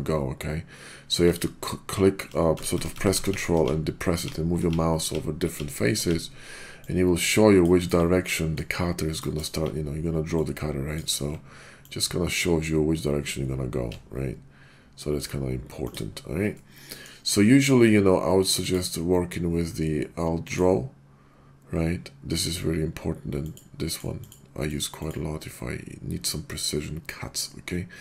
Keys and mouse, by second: 6.8-7.6 ctrl+drag, 7.8 click, 8.5-9.2 ctrl+drag, 10.4-11.0 ctrl+drag, 11.0 ctrl+drag, 11.8-15.2 ctrl+drag, 15.8 ctrl+alt+drag, 16.5-17.0 middle drag, 18.6-28.0 drag.